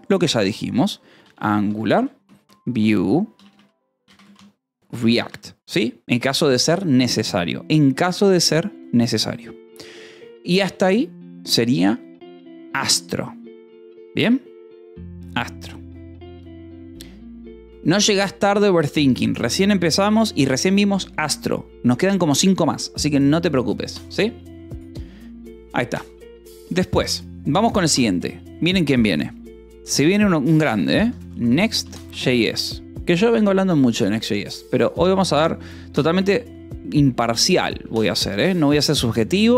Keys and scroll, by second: 0.7-5.5 typing, 11.4 Return, 29.4 3, 30.6-33.0 typing, 32.3 Escape, 33.5 Return, 37.7 Escape, 39.2 j.